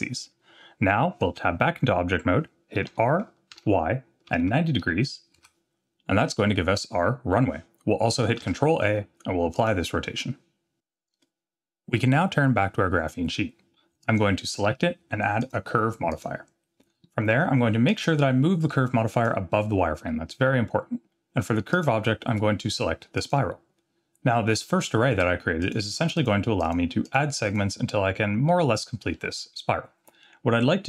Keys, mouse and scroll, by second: 0.5 scroll down 1, 1.3 Tab, 2.9 r, 6.2-6.8 middle drag, 8.4 ctrl+a, 14.0 click, 15.4-16.2 drag, 17.9-19.2 drag, 21.7-23.3 drag, 25.6 click, 25.9 click, 26.2 click, 26.6 click, 27.0 click, 27.5 click, 28.5-29.1 middle drag, 30.6 scroll down 2.